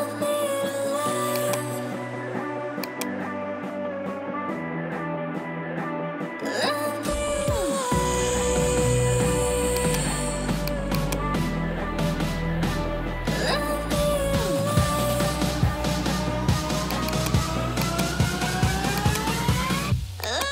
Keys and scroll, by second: 11.9-15.7 typing.